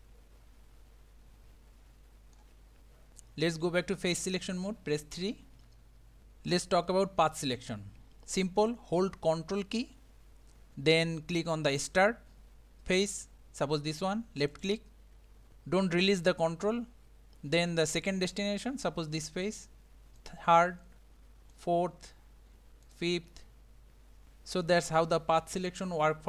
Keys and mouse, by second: 5.1 3, 14.4-15.2 typing, 14.6 ctrl+click, 19.2 ctrl+click, 21.5 ctrl+click.